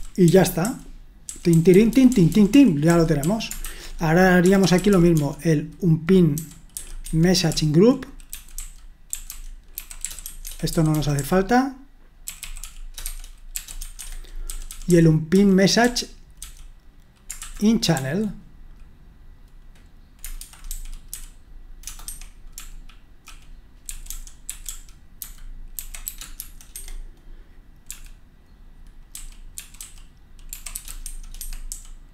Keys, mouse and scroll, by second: 0.0-5.1 typing, 6.3-15.8 typing, 17.2-18.4 typing, 20.2-32.1 typing, 22.0 Escape.